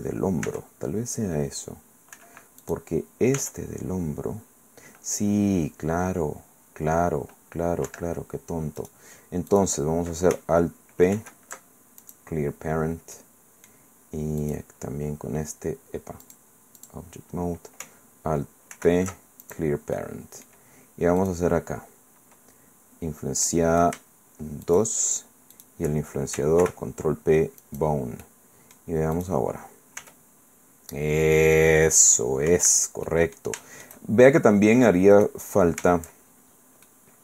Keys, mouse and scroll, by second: 0.5 r, 2.1 Escape, 2.6 click, 3.4 r, 7.9 Escape, 8.8 click, 9.5 click, 11.1 alt+p, 12.0 alt+click, 13.1-14.4 middle drag, 14.4 right click, 16.2 click, 16.8 click, 18.7 alt+p, 19.4 alt+click, 20.0 alt+click, 23.5 click, 24.7 shift+click, 24.7 shift+right click, 25.5 shift+right click, 26.6 ctrl+p, 27.6 click, 28.2 click, 29.2 click, 30.0 r, 32.5 Escape, 33.1 click, 33.6 shift+middle click, 34.3-35.0 shift+scroll down 1, 35.1 right click, 36.4-36.9 shift+scroll down 2, 36.9-37.2 drag.